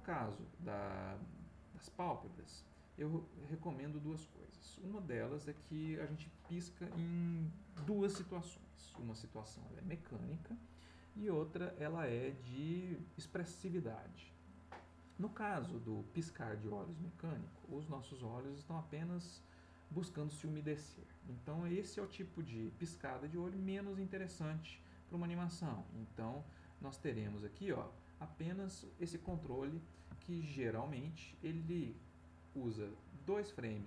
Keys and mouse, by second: 1.0 click, 3.4-5.5 drag, 24.0 middle click, 25.7-27.5 drag, 29.6 middle click, 30.2 ctrl+middle click, 31.9-33.8 drag.